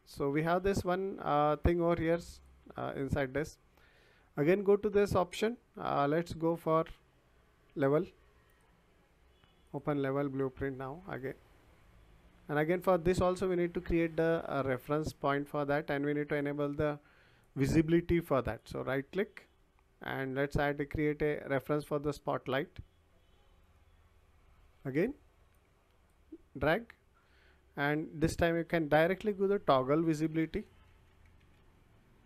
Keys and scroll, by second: 30.0-32.0 typing.